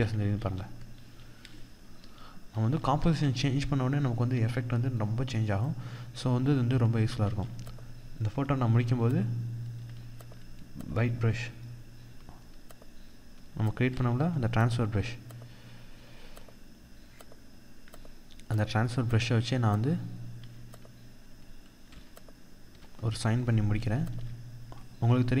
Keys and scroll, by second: 0.9 ctrl+alt+z, 6.6 ctrl+=, 23.5 ctrl+z.